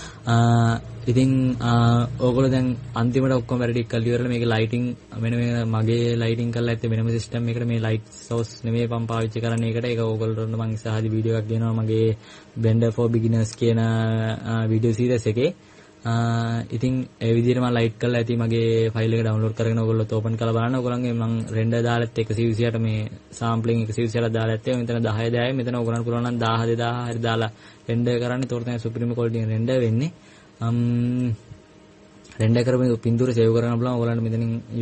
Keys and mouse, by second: 0.0 Escape.